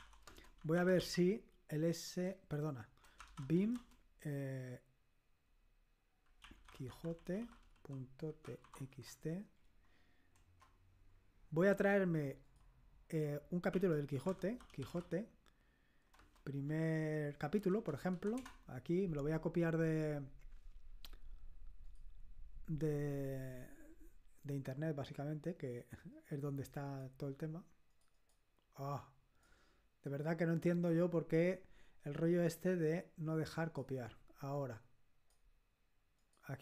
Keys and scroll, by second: 0.0-4.0 typing, 6.1-9.6 typing, 10.3 Return, 13.4-15.5 typing, 16.6 p, 17.6 Down, 17.8 Down, 18.2 Down, 18.4 Return.